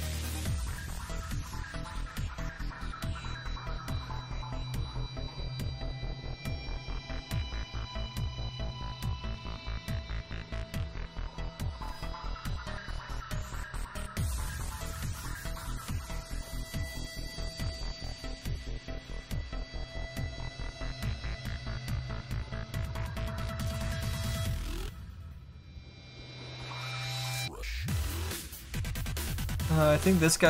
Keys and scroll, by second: 21.8 s.